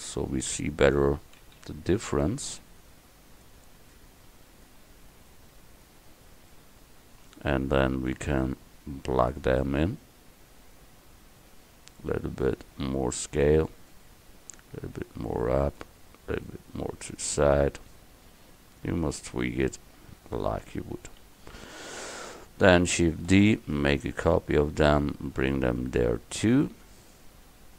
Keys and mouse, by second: 1.5 s, 6.6-8.3 middle drag, 8.3-10.1 drag, 12.2 s, 15.1-17.1 drag, 18.1 middle click, 21.3 KP_1, 23.4 shift+d.